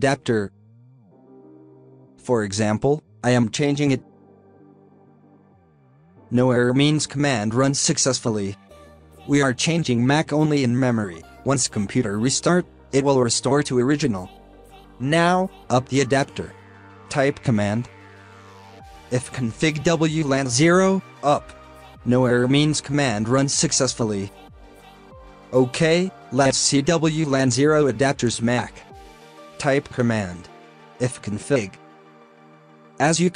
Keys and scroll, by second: 4.1 typing.